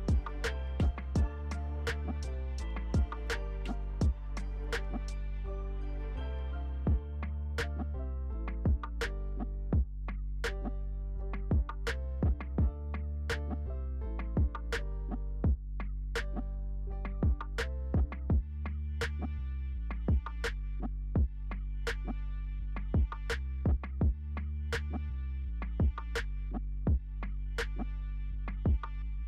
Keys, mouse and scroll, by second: 0.1-0.4 alt+scroll down 1, 0.4-1.0 alt+scroll up 1, 1.0 alt+click, 3.4-3.9 alt+scroll down 1, 4.3-4.8 alt+scroll up 1, 5.3 alt+click, 6.1 alt+scroll down 1, 7.9-8.8 alt+scroll up 1, 9.5 alt+click, 10.1-10.5 alt+scroll down 1, 10.5 scroll up 1, 10.9 alt+click, 11.2-11.9 alt+scroll down 1, 12.4 alt+click, 12.9-13.6 alt+scroll down 1, 13.6-14.2 alt+scroll up 1, 14.2 alt+click, 14.6 alt+scroll down 1, 15.4 alt+click, 15.9 alt+scroll down 1, 16.3-16.7 alt+scroll up 1, 17.1 alt+click, 18.0-18.3 alt+scroll down 1, 18.3 alt+click, 19.0-19.7 alt+scroll down 1, 19.7-20.4 alt+scroll up 1, 20.4 alt+click, 20.7-21.7 alt+scroll down 1, 21.7 alt+click, 22.9-23.4 alt+scroll up 1, 23.4 alt+click, 23.8-24.2 alt+scroll down 1, 24.8 click, 25.4-25.7 alt+scroll up 2, 25.8 alt+click, 26.2-26.8 alt+scroll down 1, 26.8 alt+click, 27.9 alt+scroll up 1, 28.5 alt+click, 29.0 alt+scroll down 1.